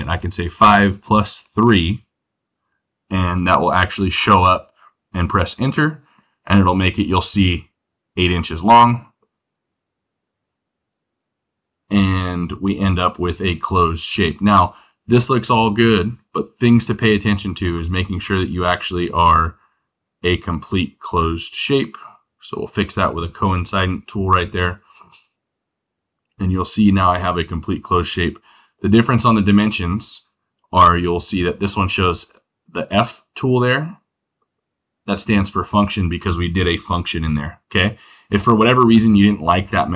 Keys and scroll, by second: 1.4 3.